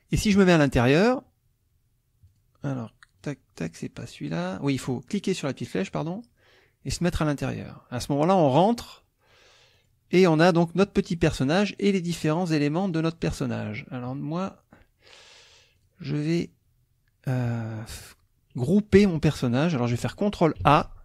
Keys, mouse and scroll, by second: 0.4 click, 2.3 click, 3.2 click, 3.6 click, 4.4 click, 5.9 click, 7.0 click, 9.7 click, 10.2 click, 12.3 click, 12.9 click, 13.3 click, 14.2 middle click, 14.4 click, 15.8 click, 16.4 click, 19.4 middle click, 20.6 ctrl+a.